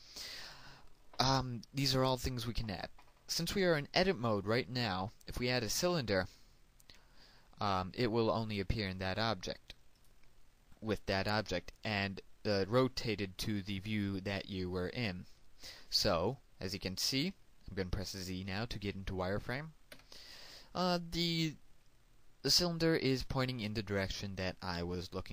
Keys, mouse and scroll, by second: 7.3 click, 12.1-20.2 middle drag, 21.3 z, 22.9-25.3 middle drag.